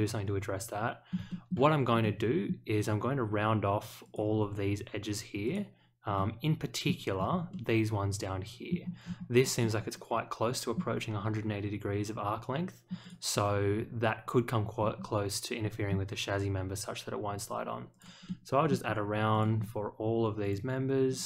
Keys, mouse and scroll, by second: 1.3 shift+middle click, 2.0-2.4 middle drag, 4.0 click, 5.4 click, 6.1-6.8 middle drag, 7.5-8.6 middle drag, 9.0 scroll down 1, 9.6-10.7 middle drag, 13.0 click, 14.7-15.7 scroll up 1, 15.8 scroll up 1, 17.9 click, 18.2-18.6 middle drag, 19.3 click, 20.4 ctrl+click, 21.0 ctrl+click.